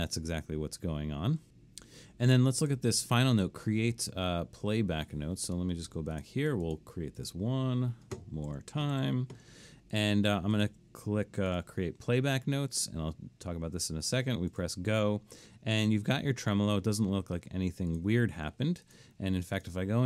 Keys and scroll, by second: 8.5-8.9 typing, 9.5 Escape.